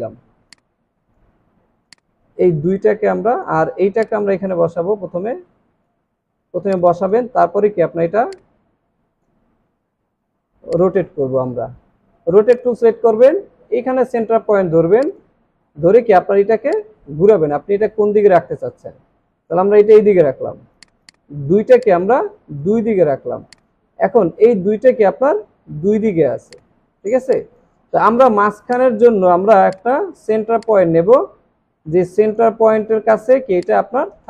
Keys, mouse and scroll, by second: 0.2 alt+scroll down 1, 0.5 space, 6.5 alt+scroll up 1, 6.7 space, 8.3 shift+click, 10.6 space, 21.0 double click, 21.4 alt+scroll down 1, 22.2 space, 26.9 alt+scroll up 1.